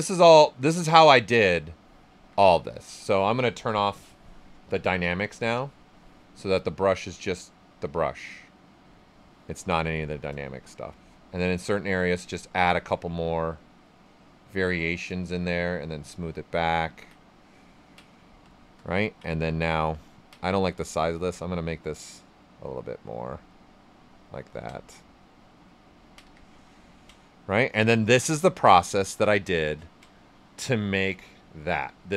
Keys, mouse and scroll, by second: 2.1 ctrl+z, 4.9 click, 6.9-12.9 drag, 12.9 alt+right click, 14.8 click, 15.3-17.0 shift+drag, 17.0 ctrl+right click, 18.9 right click, 20.9-24.9 ctrl+drag, 24.9 right click, 26.9 ctrl+right click, 28.9 alt+right click, 30.8 ctrl+alt+right click.